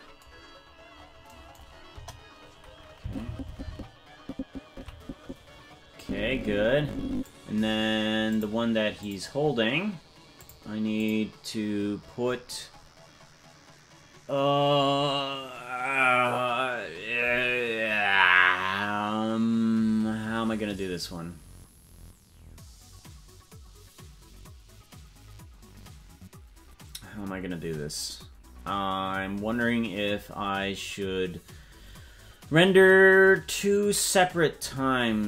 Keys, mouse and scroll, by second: 0.6-1.2 scroll up 6, 1.9 KP_0, 3.0 Left, 3.2 Left, 3.4 Left, 3.6-5.2 Left, 5.9-7.2 drag, 8.3 click, 9.0 click, 10.3 click, 10.9 click.